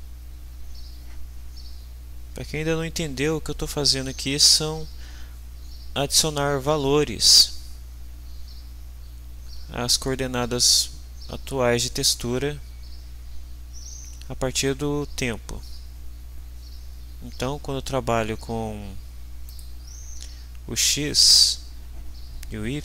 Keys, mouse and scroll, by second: 19.4 click.